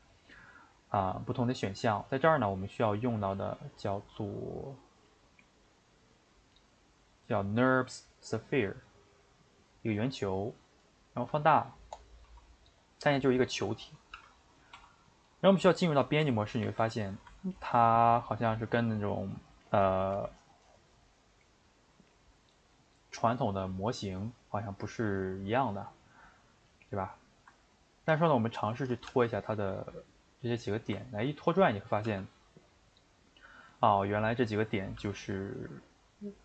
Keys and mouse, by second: 11.3 s, 12.2 s, 13.5 middle click, 14.1 g, 15.4-16.2 middle drag, 16.2 Tab, 16.8 a, 17.0-28.4 middle drag, 28.4 ctrl+right click, 29.1 g, 31.0-32.0 ctrl+middle drag, 32.0 g, 35.0 g, 35.5-36.4 middle drag.